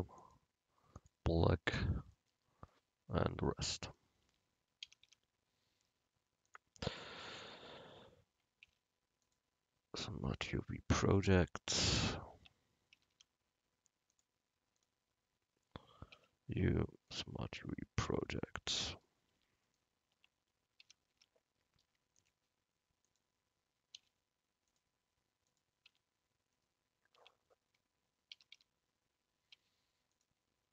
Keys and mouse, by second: 4.0 right click, 4.4 Tab, 5.0 a, 5.1 a, 8.8 u, 11.3 Tab, 11.9 click, 12.5 Tab, 13.0 a, 13.2 a, 14.2-16.0 drag, 16.2 u, 18.9 click, 19.4 Tab, 19.8 click, 20.2 Tab, 20.9 a, 21.2 a, 24.0 u, 26.0 Tab, 27.3 Tab, 28.4 a, 28.6 a, 29.6 u.